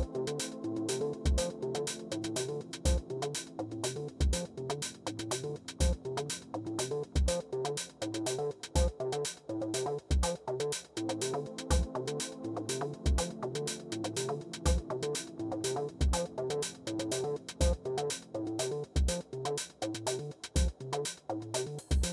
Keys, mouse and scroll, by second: 3.5-4.7 drag, 4.5-8.8 typing, 9.6 Return, 11.3-12.5 typing, 13.2 Return, 15.4 Return, 17.0 Return, 17.4-22.1 typing.